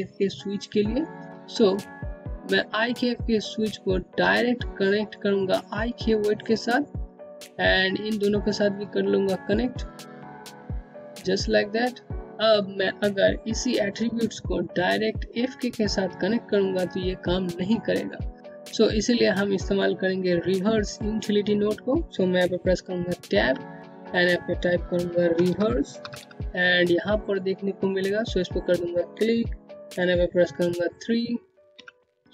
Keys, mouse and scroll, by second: 0.2 alt+middle click, 0.7 Home, 2.1 click, 10.8-12.2 scroll down 1, 21.3 Tab, 23.0-24.6 typing, 27.5 click, 30.8 click.